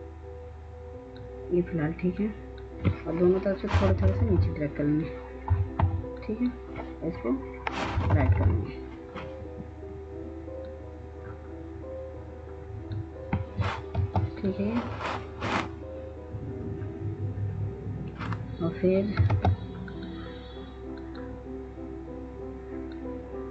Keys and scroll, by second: 3.9 Down, 4.1 Down, 8.1 Up, 8.1 Right, 8.3 Right, 14.2 ctrl+space, 19.5 ctrl+space.